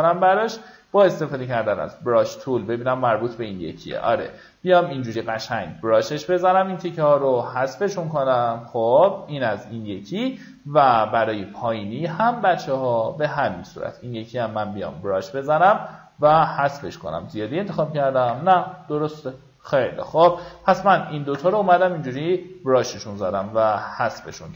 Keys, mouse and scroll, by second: 0.2 alt+right click, 1.1 alt+right click, 1.9-4.1 drag, 4.9 alt+scroll up 1, 5.6 alt+right click, 6.5-15.9 drag, 16.0-16.3 alt+scroll down 1, 16.7 alt+scroll up 1.